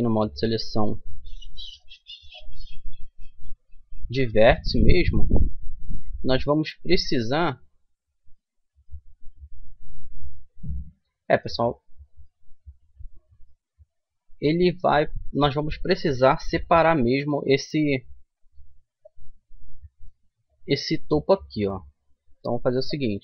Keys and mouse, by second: 0.0-1.8 middle drag, 2.5-4.6 middle drag, 4.6-5.9 drag, 5.9-6.9 middle drag, 7.3-8.5 middle drag, 8.9-10.3 middle drag, 11.4-14.1 middle drag, 17.1-21.2 middle drag, 18.1 c.